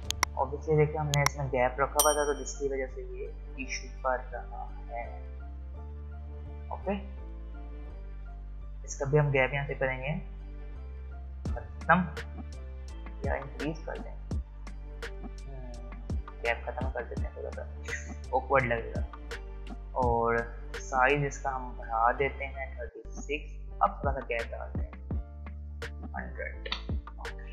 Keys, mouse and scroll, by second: 6.4 click, 11.2 click, 16.2 click, 22.3 click.